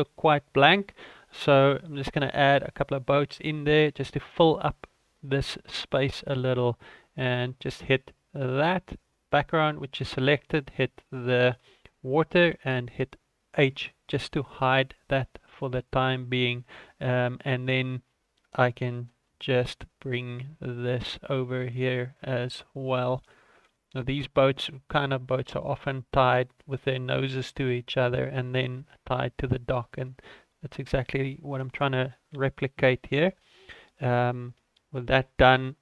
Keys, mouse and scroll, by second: 8.9 right click, 10.0 shift+right click, 10.2 shift+right click, 11.0 right click, 12.4 h, 14.3 scroll down 3, 14.5 shift+middle click, 15.7 shift+middle click, 16.0-16.3 scroll up 4, 16.6 shift+middle click, 17.0 click, 18.1-18.5 scroll down 5, 18.5 shift+middle click, 19.5 shift+d, 21.2 scroll up 4, 21.6 shift+middle click, 22.3 r, 23.8 g, 24.8 scroll up 2, 25.1 shift+middle click, 25.8 click, 26.8 scroll up 1, 27.6 r, 29.4 g, 30.7-31.5 scroll up 1, 31.6 right click, 34.3 ctrl+s, 35.0 alt+h.